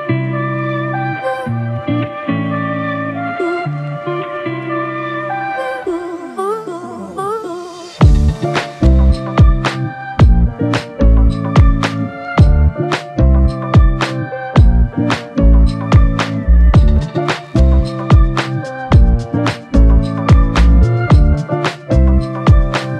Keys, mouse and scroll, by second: 0.7 alt+click, 1.6 ctrl+click, 5.4 alt+click, 6.1 ctrl+click, 8.2 ctrl+l, 9.8 ctrl+click, 13.9 double click, 18.3 alt+click, 19.4 double click, 19.8 alt+click, 20.5 ctrl+click, 20.9 ctrl+double click, 21.2 ctrl+click.